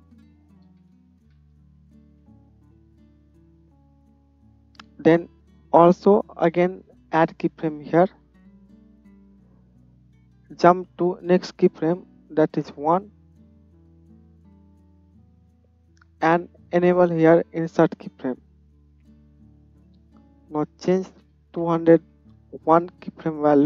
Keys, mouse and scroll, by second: 1.4 KP_0, 6.0-10.3 middle drag, 10.3-15.1 drag, 15.1-19.7 middle drag, 19.7-23.6 drag.